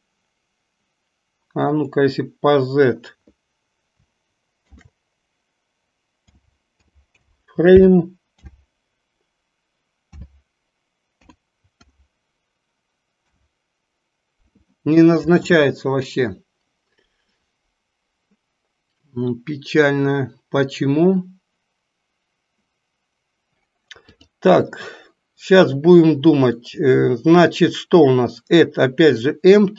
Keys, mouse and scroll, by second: 1.9-13.4 drag, 24.3-29.7 drag.